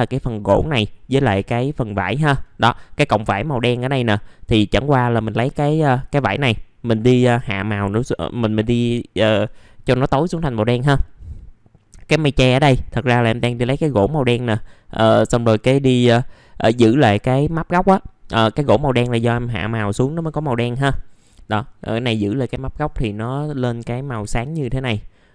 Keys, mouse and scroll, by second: 24.6 scroll down 1.